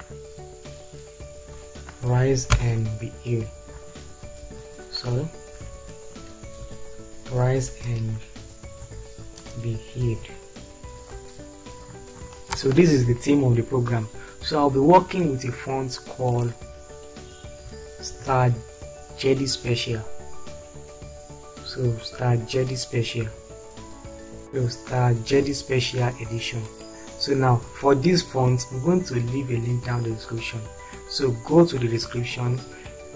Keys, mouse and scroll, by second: 2.5 shift+6, 3.5 Delete, 4.5 shift+5, 5.6 BackSpace, 6.8 shift+7, 8.0-11.9 typing, 12.5 ctrl+space, 18.0 s.